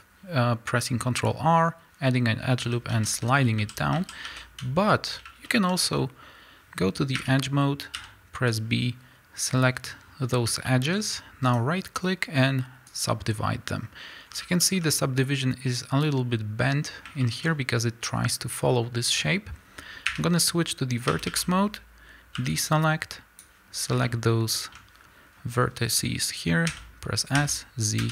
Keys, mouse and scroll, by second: 0.1 x, 2.6 a, 3.8 scroll down 1, 4.0 a, 5.1 z, 5.5-13.2 shift+middle drag, 9.4 b, 13.2-14.6 right drag, 13.9-14.6 scroll up 2, 14.6-28.1 shift+middle drag, 16.9 scroll down 2, 20.3 1, 21.1 a, 23.4 b, 26.9 s.